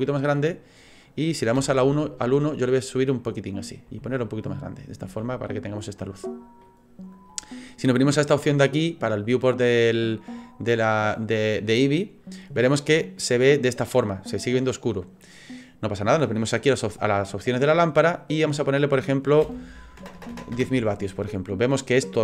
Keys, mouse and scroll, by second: 0.4 middle click, 1.6 KP_1, 2.6 click, 3.9 s, 5.8 middle click, 9.7 click, 13.2 middle click, 13.9 scroll up 1, 14.3-16.8 scroll down 1, 17.3 click, 20.1 KP_0.